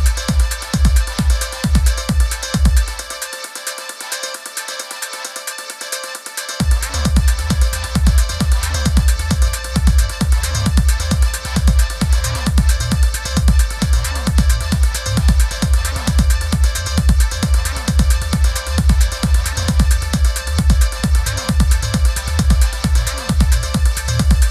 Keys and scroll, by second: 0.1 super+c, 0.8 super+f, 8.5 super+c, 9.1 super+v, 15.1 super+c, 15.3 super+v, 23.2 super+c, 23.6 super+v.